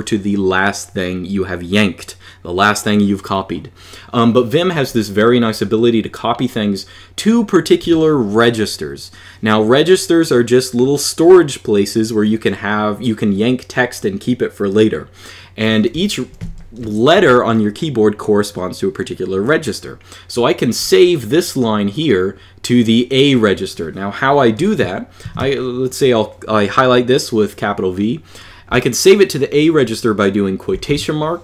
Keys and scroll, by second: 15.7-16.9 typing, 25.0 shift+v, 30.5 shift+', 31.3 a.